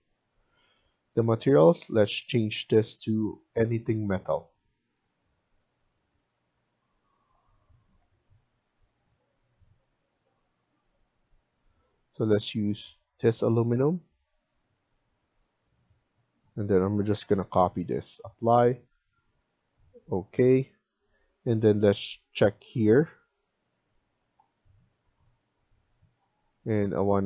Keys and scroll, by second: 17.1 ctrl+c.